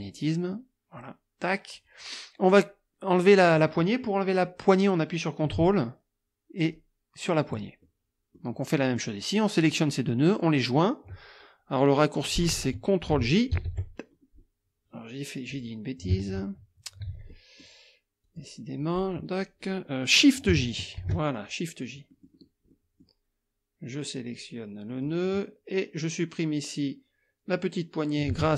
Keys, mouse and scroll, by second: 1.0 click, 6.6 ctrl+click, 7.8 ctrl+click, 9.0 click, 13.5 ctrl+j, 15.5 click, 17.2 ctrl+z, 17.3-17.8 ctrl+scroll up 2, 18.2 click, 19.0 click, 21.0 shift+j, 22.1 click, 22.7 click, 24.2 click.